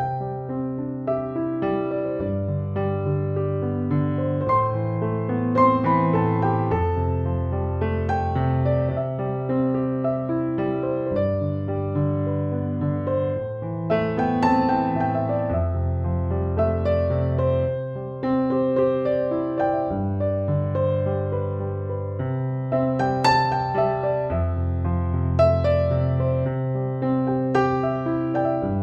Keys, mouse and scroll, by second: 0.3 [, 0.5 click, 1.2 ], 1.6 click, 2.6 ], 3.1 click, 5.3 click, 9.2 space, 9.4 click, 9.6-10.0 space, 10.3 ctrl+-, 11.7 space, 12.1 click, 12.2-12.7 space, 13.0-14.0 click, 13.6 space, 14.5 ctrl+=, 16.2 click, 16.4 space, 16.6 click, 16.9-17.2 space, 17.4 ctrl+b, 18.9-21.9 drag, 22.9-23.5 drag, 24.6 space, 24.8 click, 25.1 space, 26.0 ctrl+-, 27.2 ctrl+z.